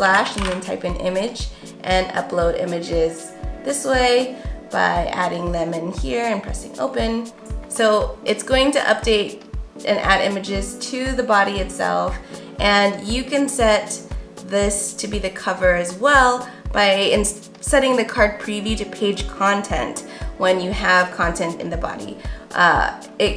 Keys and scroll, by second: 0.0-0.8 typing.